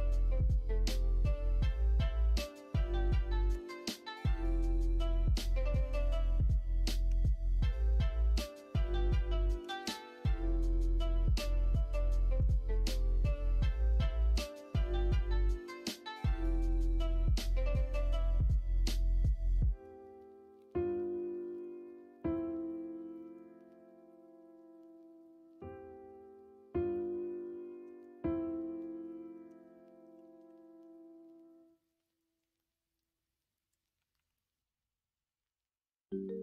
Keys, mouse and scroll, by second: 7.0 Tab, 7.7 KP_1, 8.1 KP_3, 9.5 g, 11.7 r, 13.8 s, 19.1 shift+middle click, 28.8 shift+middle click, 30.1 KP_1, 30.1 KP_2, 30.4 KP_3, 33.2 click, 33.9 s.